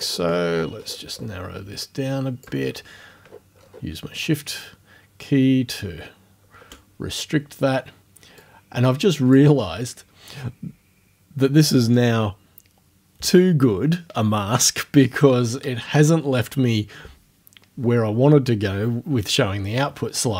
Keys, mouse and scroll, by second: 0.0-1.1 scroll up 1, 1.9 click, 2.7-3.4 shift+scroll up 1, 3.6 shift+scroll up 1, 4.5 shift+scroll down 1, 5.2-5.5 shift+scroll down 1, 8.4-9.5 drag.